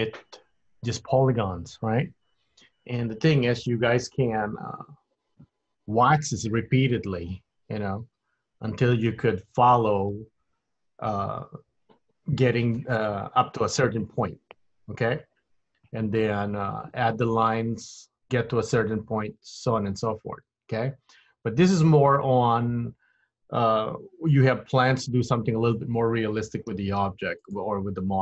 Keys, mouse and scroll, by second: 24.4 middle click, 25.7 click, 26.9 g.